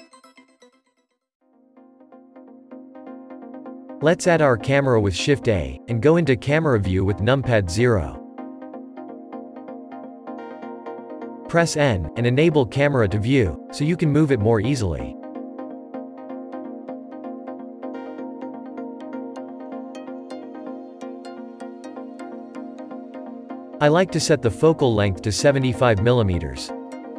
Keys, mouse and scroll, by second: 0.6 click, 1.4-4.6 shift+middle drag, 4.6 shift+a, 10.4 KP_0, 12.0 n, 14.6 drag, 15.8-17.9 scroll down 16, 17.9-18.5 middle drag, 18.5 scroll down 1, 19.2-25.6 shift+middle drag, 25.6-26.9 drag, 26.9 scroll down 2.